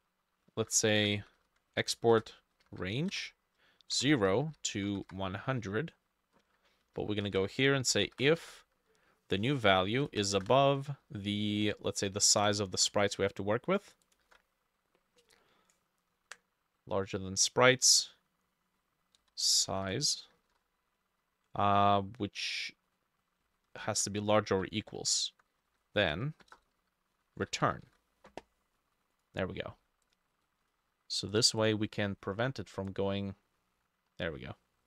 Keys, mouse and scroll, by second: 0.6 ctrl+z, 1.0 Up, 1.4 ctrl+Left, 1.9-5.6 typing, 2.2 middle click, 6.9 Down, 7.3 Return, 8.0 i, 8.3 ctrl+middle click, 8.4 ctrl+v, 10.1 space, 10.3 shift+., 11.7 scroll down 1, 12.6 double click, 12.8 typing, 13.0 ctrl+c, 13.0-14.2 scroll up 1, 14.3 ctrl+v, 19.2-21.0 typing, 19.5-22.5 drag, 20.0 shift+middle click, 23.5 ctrl+middle click, 23.6 ctrl+Left, 23.8 ctrl+Left, 24.6 =, 24.7-25.7 ctrl+middle drag, 24.8 ctrl+|, 25.0 ctrl+Right, 25.6 ctrl+Right, 25.8-28.1 typing, 25.9 middle click, 31.6 double click.